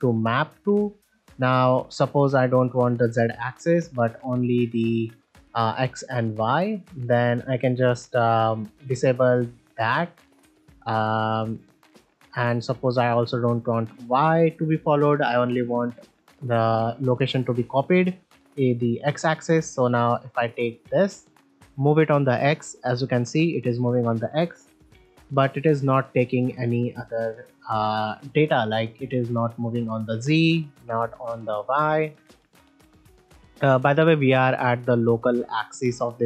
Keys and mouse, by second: 0.9-1.3 middle drag, 3.3 click, 4.8 middle drag, 6.8-7.2 middle drag, 10.7-11.1 middle drag, 13.3 click, 14.4-14.9 middle drag, 15.5 shift+middle drag, 16.0 middle click, 17.2 ctrl+middle drag, 19.3 shift+middle drag, 20.5 middle click, 23.1-23.7 right drag, 23.7 middle click, 25.0 g, 27.6-28.0 middle drag, 28.6 click, 30.1 middle click, 32.5 middle drag, 33.2 middle click.